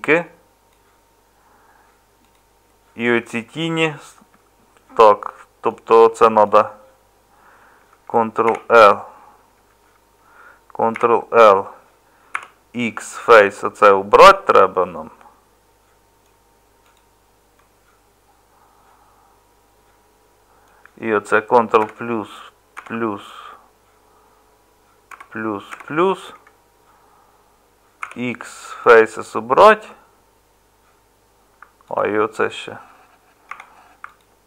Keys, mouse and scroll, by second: 4.1 Tab, 8.4 ctrl+l, 12.3 x, 21.8 ctrl+KP_Add, 28.0 x, 33.5 3.